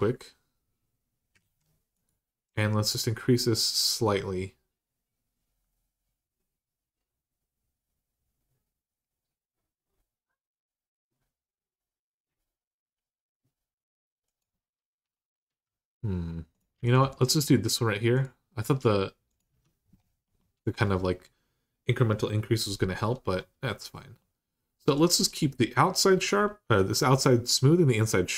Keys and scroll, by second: 1.2 ctrl+z, 19.3 Tab.